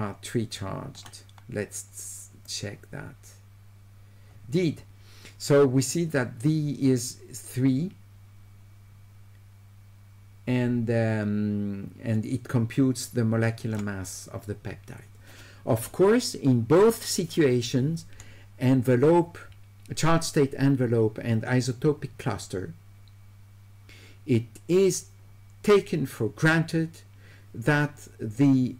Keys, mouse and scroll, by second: 2.5-13.8 drag.